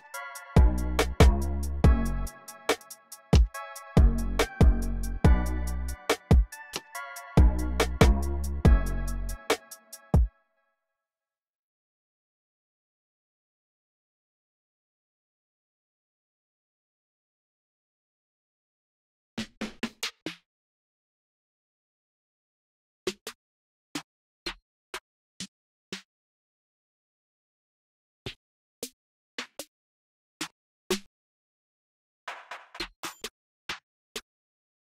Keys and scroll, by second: 1.4 alt+super+s, 1.7 t, 3.1 t, 3.7 alt+super+l, 6.3-7.2 typing, 9.9 space, 13.3 Up, 13.8 Down, 14.4 Right, 15.1 Right, 15.5 Up, 16.0 Right, 17.0 Down, 18.0 Down, 18.1 Down, 19.1 Right, 19.2-20.6 Down, 20.6 Up, 22.5 Down, 22.6 Down, 23.7 Down, 24.1 Down, 25.1 Down, 25.6 Down, 28.6 Up, 29.1 Up, 29.3 Up, 30.6 Up, 32.5 Up, 32.7 Up, 33.4 Up, 33.9 Down.